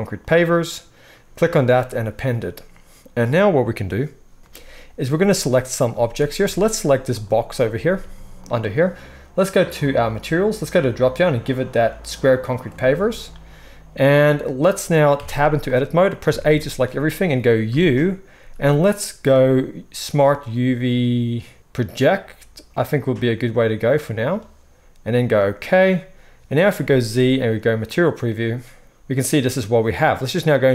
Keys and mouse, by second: 0.5-1.2 middle drag, 5.9 z, 7.5-9.9 middle drag, 8.0 g, 9.9 click, 10.0 middle click, 10.7-30.7 drag, 15.3 Tab, 16.2 a, 17.7 u, 26.8 z.